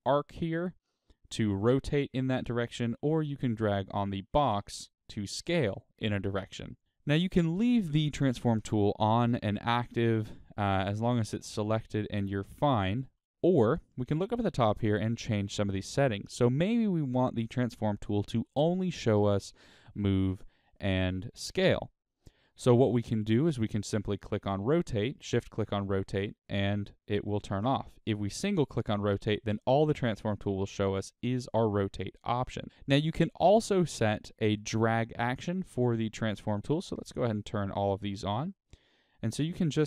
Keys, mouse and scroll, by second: 1.2 click, 2.3 right click, 4.6 click, 5.5 right click, 12.0-14.5 middle drag, 12.7-13.2 scroll down 2, 17.2-20.2 middle drag, 20.2 shift+click, 24.4 shift+click, 25.2 shift+click, 26.1 click, 32.7 click, 33.4-36.2 drag, 36.8 click, 37.4 shift+click, 37.7 shift+click, 38.8-39.8 drag.